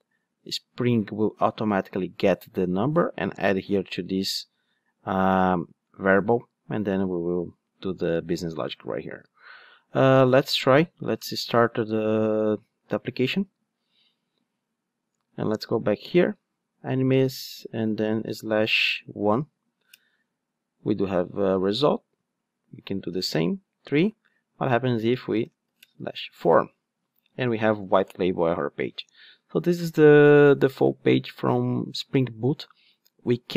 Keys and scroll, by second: 12.9 ctrl+d.